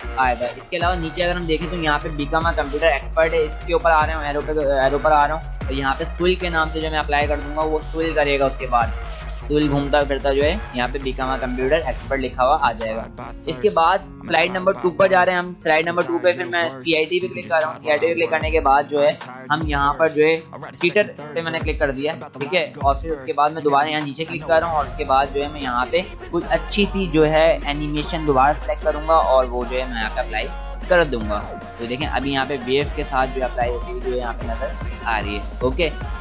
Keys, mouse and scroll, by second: 2.0 click, 14.1 click, 20.5 click, 23.6 click, 29.6 click.